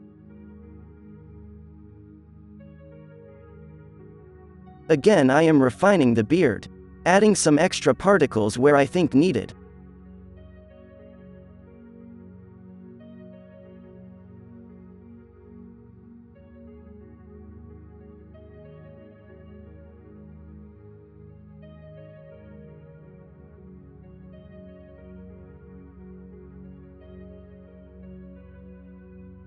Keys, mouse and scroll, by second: 1.0 f, 2.3 f, 2.8 f, 3.1 f, 3.6-9.9 drag, 4.2 f, 4.7 f, 5.2 f, 10.0 drag, 10.8 b, 11.5 ctrl+l, 11.7 f, 12.1-14.8 drag, 12.6 f, 12.9 f, 14.5 f, 17.8 f, 19.0 drag, 19.4 f, 19.8 alt+a, 20.0 f, 20.0 d, 20.2 f, 20.5 click, 21.8 f, 21.9 click, 22.8 f, 23.8-26.7 drag, 24.6 alt+a, 24.7 z, 27.3 f, 28.2-29.4 drag.